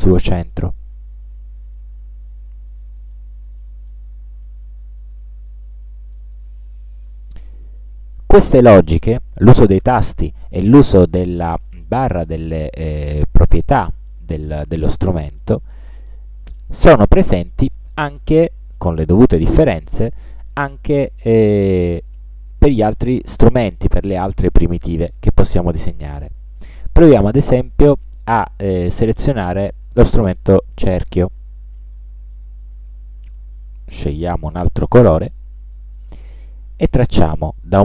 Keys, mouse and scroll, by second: 3.3 click, 5.2 ctrl+scroll down 2, 5.7 ctrl+scroll up 2, 6.3 ctrl+middle click, 31.3 click, 33.8 click.